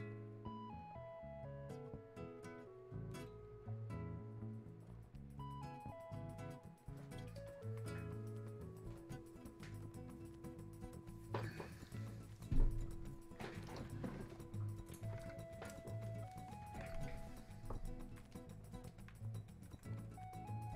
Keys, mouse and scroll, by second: 2.4-9.1 drag, 17.7 alt+click, 18.3 click, 20.5-20.7 drag.